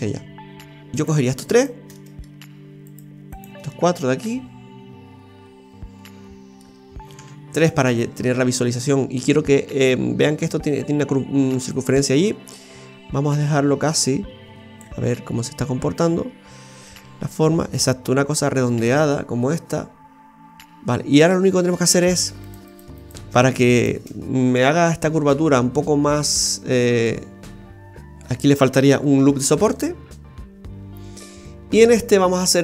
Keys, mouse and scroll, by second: 0.9 middle click, 0.9 right click, 1.5 shift+right click, 1.9 middle click, 2.9 shift+right click, 3.3 shift+right click, 3.7 middle click, 4.5 middle click, 7.1 KP_3, 7.6 KP_1, 7.8 KP_1, 11.7 click, 15.0-16.1 scroll up 4, 16.1-16.6 scroll up 1, 16.8 Tab, 18.6-19.2 scroll down 1, 19.2-20.3 scroll down 2, 20.9 Tab, 22.1 right click, 22.5-23.0 alt+shift+right click, 22.7 alt+shift+right click, 23.8 alt+shift+right click, 27.0 click, 29.2 ctrl+r, 32.3 middle click.